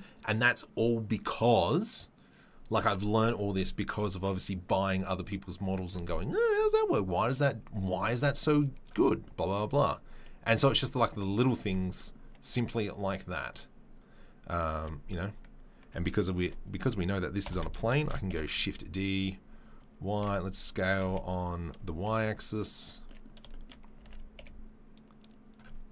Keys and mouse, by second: 13.4 click, 13.9 click, 14.7 Tab, 15.3 click, 16.4 middle click, 16.4 3, 16.6 click, 16.7-25.9 middle drag, 17.4 ctrl+l, 18.0 shift+d, 20.1 s.